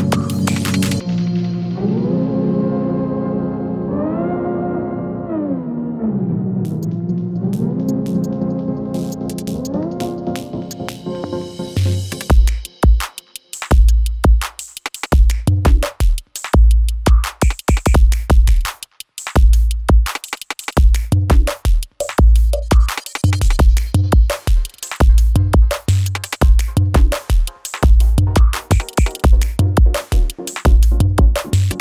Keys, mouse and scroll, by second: 0.4 click, 0.8 space, 3.3 space, 6.3 click, 8.6 scroll up 1, 9.2 shift+click, 12.5 shift+click, 12.8 ctrl+shift+c, 13.7 Return, 16.3 click, 18.0-19.4 typing, 20.1 click, 24.4 ctrl+c, 25.2 click, 26.0 shift+click, 26.5 ctrl+v, 27.7 click, 30.3 space.